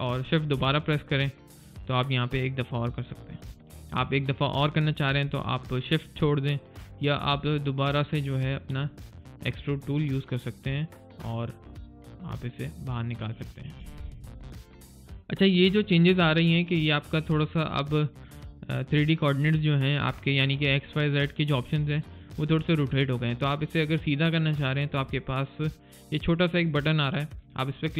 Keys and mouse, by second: 1.4 click, 8.6 click, 14.7 alt+middle click, 15.0 alt+right click, 15.3 alt+click, 15.9 alt+middle click, 27.8 alt+click.